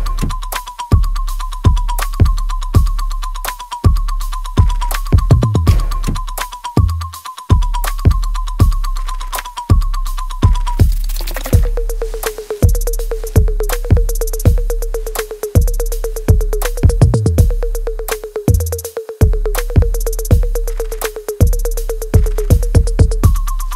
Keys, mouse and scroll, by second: 1.0 right click, 1.8 click, 2.1-3.6 alt+right drag, 3.6 click, 3.9 middle click, 4.4-6.5 alt+drag, 6.5 ctrl+s, 7.0 click, 7.7 space, 9.3 right click, 10.3-13.7 drag, 13.7 space, 14.4 alt+click, 14.9 right click, 15.5 click, 15.9 alt+click, 16.9 alt+middle click, 17.8 click, 18.1 alt+click, 19.0 right click, 19.0 alt+right click, 19.6 alt+click, 20.7 ctrl+z, 22.8 alt+right click.